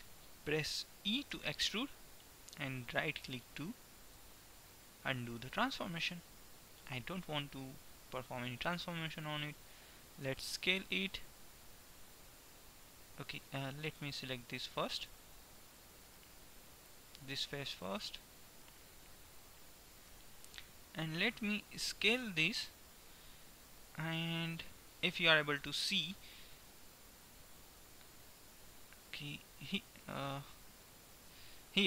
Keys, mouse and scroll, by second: 1.4-2.9 drag, 1.4 e, 10.4 s, 14.1-16.7 middle drag, 18.4 middle click, 18.7 KP_1, 20.2 KP_3, 22.7 s.